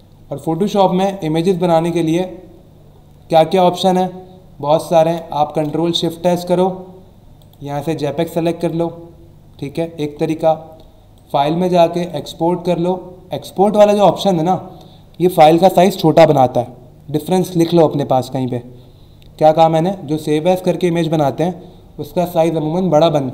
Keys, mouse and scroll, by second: 1.7 click, 5.4 ctrl+shift+s, 7.4 click, 8.6 click, 10.0 Escape, 11.1 click, 12.1 click, 14.1 click.